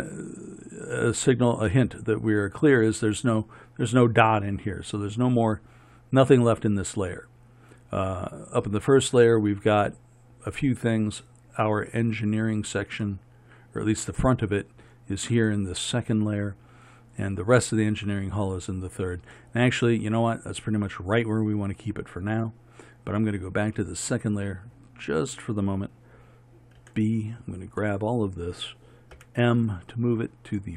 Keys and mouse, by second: 13.1-27.8 drag, 29.2 m.